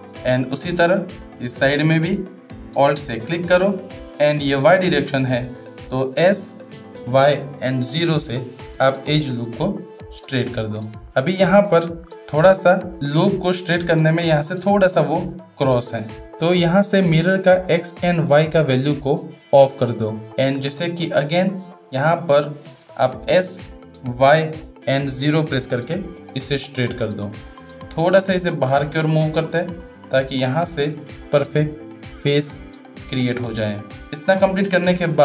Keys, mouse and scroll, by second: 0.6 shift+middle click, 1.8 shift+middle click, 11.6 shift+middle click, 17.7 click, 18.3 click, 21.0 shift+middle click, 22.9 shift+middle click, 28.7-31.1 drag, 34.6 Tab.